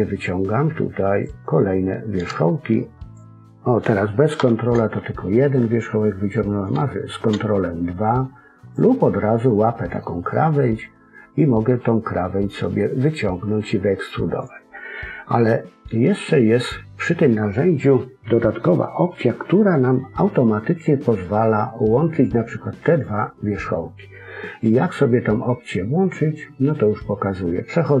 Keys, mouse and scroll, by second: 2.2 ctrl+click, 4.3 ctrl+z, 6.7 ctrl+click, 9.0 middle click, 12.4 click.